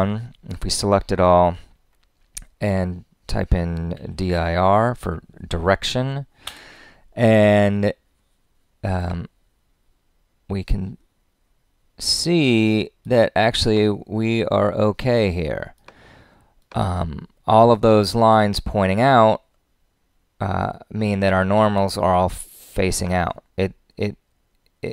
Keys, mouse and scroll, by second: 6.4 Return.